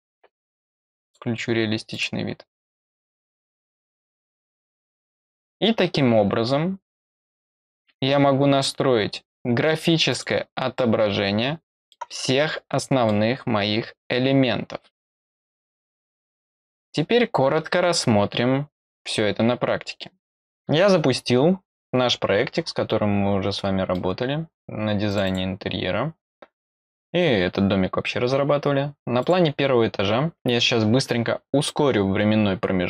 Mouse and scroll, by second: 1.0 click, 1.9 click, 9.4 scroll down 2, 10.0 click, 10.7-11.8 middle drag, 12.7 middle click, 13.4 scroll up 2, 16.8-18.1 scroll down 1, 22.6-23.4 scroll down 1, 23.4 scroll down 1, 23.5 middle click, 25.1 click, 25.2 click, 29.2 click.